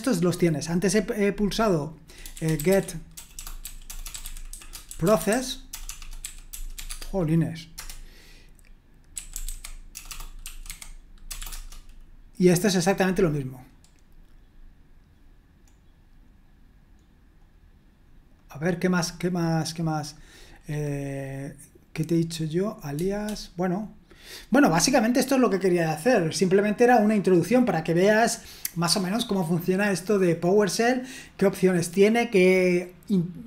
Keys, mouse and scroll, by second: 0.6 click, 2.3-6.7 typing, 6.9 Tab, 7.7 Return, 9.1-11.4 typing, 11.5 Return, 13.9-14.4 scroll down 1, 14.4-15.6 scroll down 1, 15.7-16.4 scroll down 1, 16.4-17.1 scroll up 2, 17.1-18.4 scroll up 1, 18.4 click.